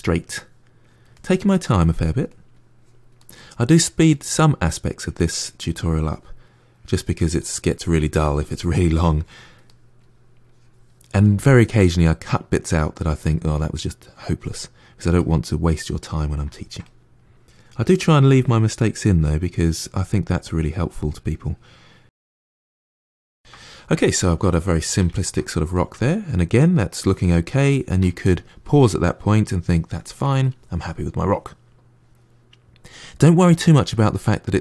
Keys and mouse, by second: 0.7 click, 1.0 middle click, 1.5 click, 2.1 middle click, 2.6 click, 3.1 middle click, 3.6 click, 4.0 middle click, 4.9-6.0 drag, 6.0 middle click, 6.6 click, 7.3-9.0 middle drag, 9.0 click, 9.5 middle click, 10.3 click, 10.9-18.1 middle drag, 18.1 click, 18.3 middle click, 18.6 click, 18.9 middle click, 19.1 click, 19.4 middle click, 19.6 click, 19.9-20.9 middle drag, 20.9-22.7 drag, 22.7-33.1 middle drag.